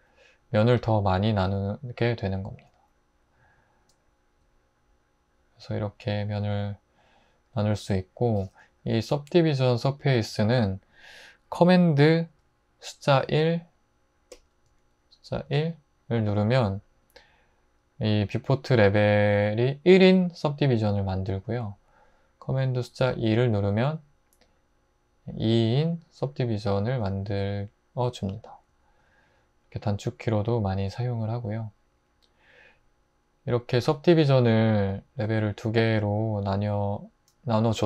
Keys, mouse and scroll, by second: 10.3 x, 13.2 super+1, 15.5 super+1, 22.9 super+2.